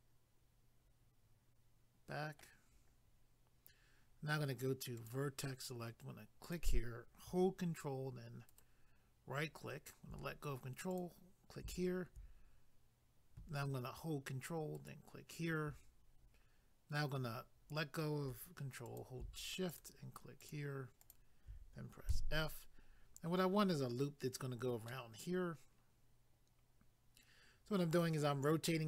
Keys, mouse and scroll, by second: 5.0 click, 6.4 click, 8.5 ctrl+right click, 10.9 click, 14.7 ctrl+right click, 18.8 click, 19.7 shift+click, 20.4 shift+click, 22.1 f, 22.9 scroll down 1, 24.9 middle click.